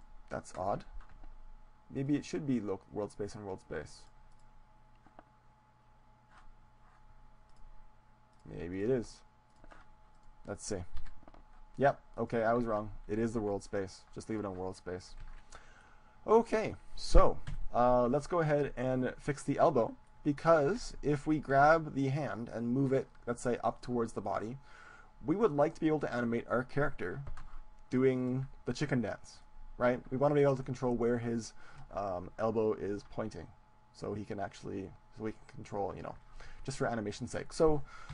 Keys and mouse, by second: 0.5 middle click, 0.8-2.0 right drag, 2.0-4.0 drag, 4.4-6.5 drag, 7.5-10.8 drag, 10.2-12.2 right drag, 11.2 g, 12.8-15.8 drag, 12.8 ctrl+z, 13.8 g, 15.4 ctrl+z, 15.8-17.8 middle drag, 17.6 KP_7, 18.2-20.0 middle drag, 20.2-23.2 middle drag, 22.2 g, 24.0-25.8 drag, 25.8 middle click, 28.5-31.4 drag, 31.4-33.0 middle drag.